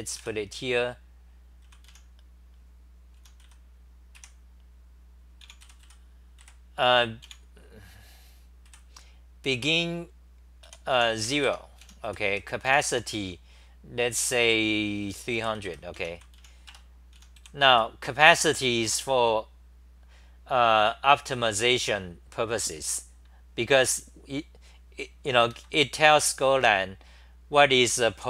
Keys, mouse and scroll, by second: 0.0-4.2 typing, 5.2-7.3 typing, 8.8 f, 10.7-13.4 typing, 11.5 Home, 15.9-18.4 typing, 25.5 ctrl+g.